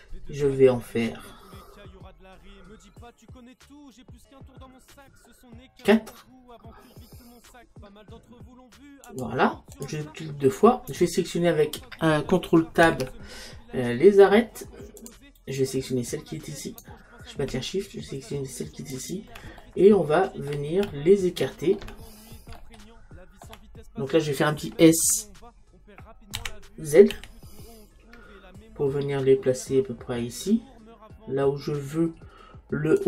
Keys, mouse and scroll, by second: 9.9 click, 12.9 ctrl+Tab, 16.7-19.6 right drag, 19.6-24.5 middle drag, 26.4 s.